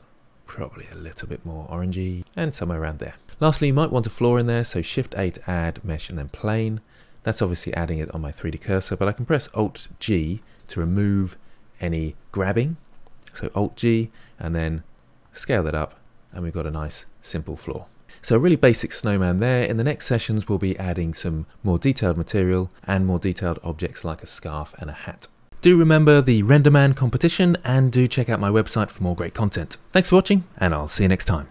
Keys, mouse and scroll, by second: 1.1 click, 2.5 click, 2.6-3.2 middle drag, 6.2 shift+a, 10.3 alt+g, 15.2 s, 16.7-31.5 middle drag.